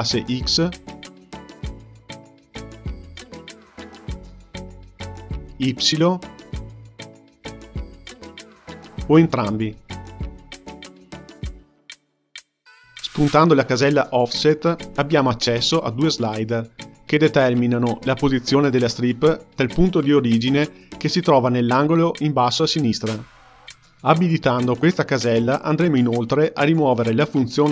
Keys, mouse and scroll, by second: 2.6 click, 4.5-13.8 drag, 14.9 click, 15.5-16.1 drag, 16.1-18.6 scroll down 5, 18.6-26.5 drag.